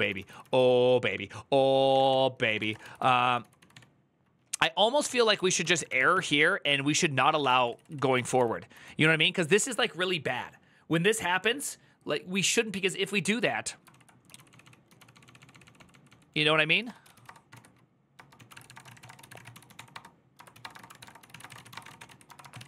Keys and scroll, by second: 0.0-9.0 typing, 13.7 ctrl+w, 13.8-22.6 typing.